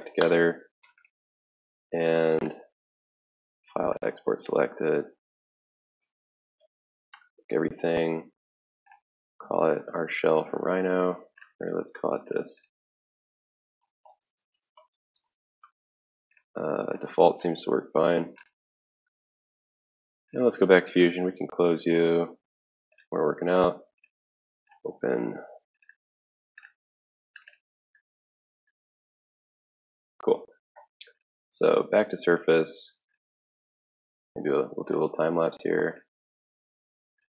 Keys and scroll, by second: 0.6 ctrl+a, 0.7-1.8 typing, 3.6 typing, 5.9-6.7 typing, 7.9 ctrl+a, 8.4 Return, 13.6-15.6 typing, 18.3 typing, 19.1 alt+Tab.